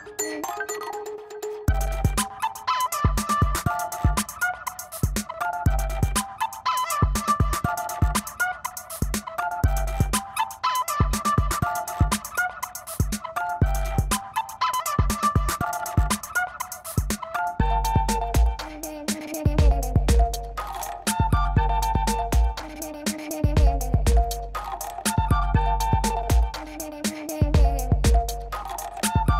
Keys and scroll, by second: 0.7-2.3 typing, 4.6 v, 4.9 space, 6.0 space, 6.3 space, 6.4 ctrl+t, 11.1 ctrl+space, 11.9 ctrl+j, 12.1 ctrl+t, 12.8 space, 13.2 e, 13.5 ctrl+alt+z, 14.0 ctrl+alt+d, 14.2 Return, 14.2 ctrl+j, 14.3 v, 14.8 e, 15.3 ctrl+t, 16.4-19.0 typing, 19.4 ctrl+t, 21.1 space, 21.6 space, 22.0 [, 23.0 0, 27.9 e, 28.6 space, 28.8 v, 29.1 l.